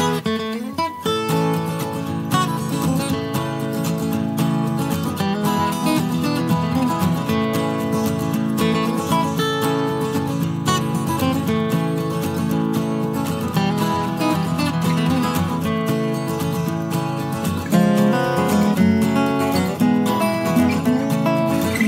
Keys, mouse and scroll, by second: 1.1 click, 1.2 space, 2.9 click, 4.8 click, 6.6 click, 6.8 space, 9.2 click, 10.2 click, 11.0-12.0 drag, 12.6 click, 13.9 click, 15.0 click, 16.5 click, 18.9 BackSpace, 20.4 click, 21.6 click.